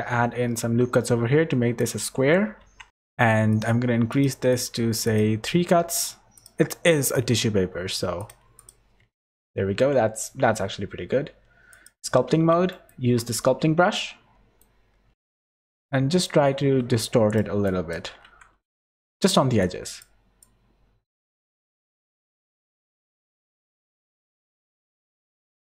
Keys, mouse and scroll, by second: 2.6 Tab, 2.9 click, 3.5 click, 4.1 click, 5.0 click, 6.3 click, 7.0 click, 7.6 z, 8.1 click, 8.5 click, 9.0 Tab, 9.7 Tab.